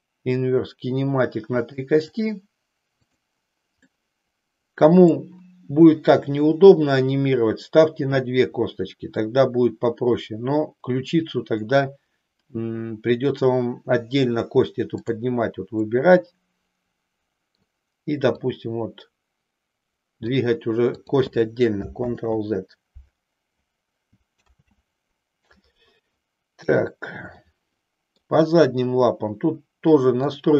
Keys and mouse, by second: 1.4 click, 2.2 click, 3.2 click, 4.0-5.3 middle drag, 16.7-17.7 middle drag, 18.5-20.3 drag, 21.0 click, 22.3 ctrl+z, 24.5 ctrl+z, 26.5 KP_3, 27.4 middle click, 30.2-30.5 drag.